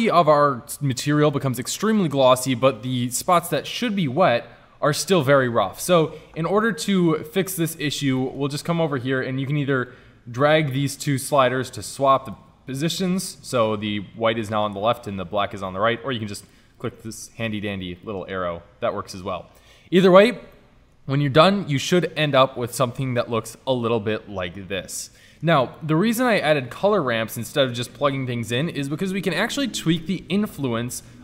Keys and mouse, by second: 9.9-10.6 drag, 10.6 drag, 11.0 click, 11.9-12.6 drag, 13.2 click, 13.3 drag, 14.1 click, 16.2 click, 16.4 click, 17.2 click, 17.5 click, 18.1 click, 19.0 click, 23.0 middle click, 23.5 middle click, 24.1-25.3 middle drag, 28.0-31.2 drag.